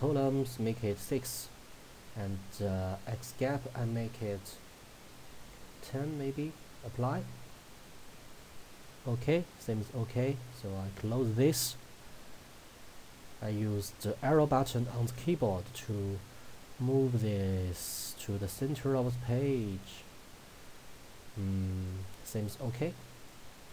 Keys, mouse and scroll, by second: 1.7 scroll up 1, 3.1-6.9 drag, 11.0 click, 14.4 Left.